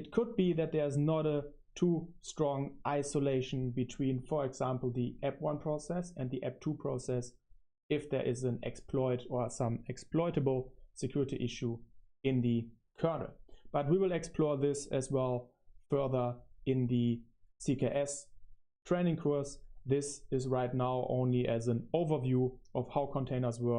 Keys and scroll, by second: 0.0-16.2 typing, 16.2 Return, 16.3 Return, 16.7 Home, 17.5 super+1, 17.5 typing, 17.8 super+1.